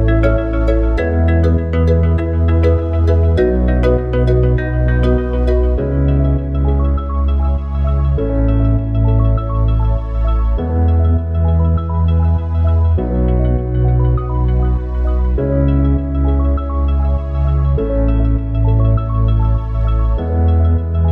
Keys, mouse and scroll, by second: 4.4 click, 7.6-16.9 drag, 20.0-21.1 drag.